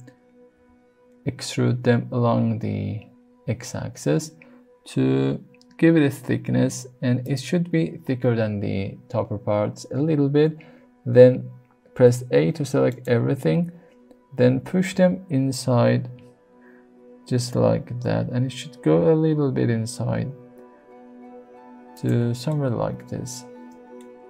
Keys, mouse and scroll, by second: 0.5 e, 7.2 click, 12.0 s, 12.9 right click, 13.5 a, 14.4 g, 14.9 x, 21.9 click, 22.5-24.0 middle drag.